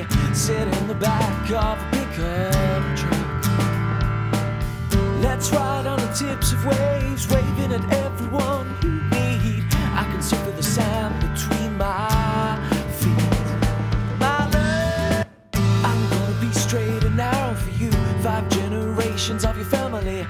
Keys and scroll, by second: 14.8 space.